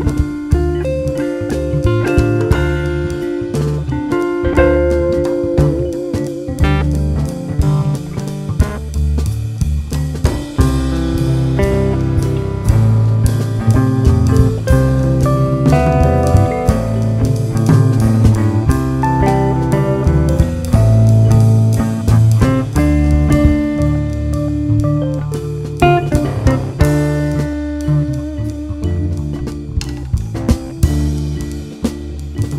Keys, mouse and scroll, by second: 0.4 `, 1.8 right click, 2.0 click, 2.1 Tab, 2.3 `, 2.9 scroll down 1, 3.5 `, 4.1 click, 4.5 KP_Decimal, 4.9-6.1 scroll down 4, 5.3 `, 6.1 scroll down 1, 6.3 2, 6.5 `, 7.1 alt+click, 7.9 shift+click, 8.5 ctrl+b, 10.8 scroll up 2, 11.4 `, 11.6-12.0 scroll up 2, 12.0 1, 12.1 shift+click, 13.1 shift+click, 13.8 shift+r, 13.9-14.4 scroll down 2, 14.4 `, 15.9 ctrl+r, 17.8 click, 19.2 shift+click, 19.7 j, 19.9 3, 20.1 click, 20.6 shift+click, 21.0 f, 21.4-21.8 scroll down 1, 21.8 `, 23.1 `, 23.4 scroll up 1, 23.6 alt+a, 23.7 `, 24.6 scroll down 1, 24.7 `, 26.2-26.6 scroll up 1, 26.6 `, 27.4 scroll up 1, 27.6-30.3 typing, 28.6 scroll up 1, 30.1 click, 31.6 alt+a, 31.9 click, 32.4 `.